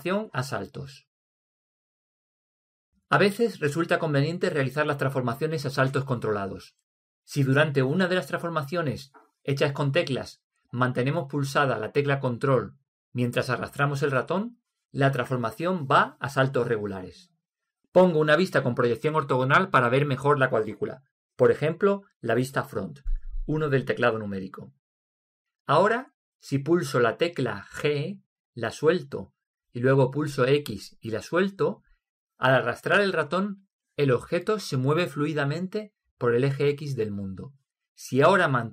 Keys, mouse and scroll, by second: 3.9-10.6 middle drag, 19.0-22.6 middle drag, 23.3 KP_1, 28.1 g, 29.6 g, 29.6 x.